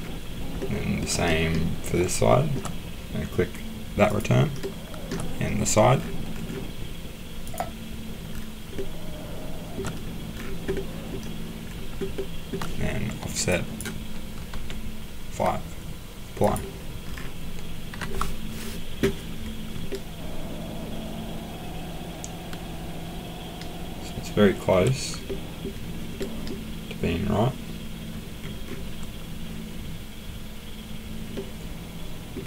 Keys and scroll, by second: 14.5 5, 17.9 Escape.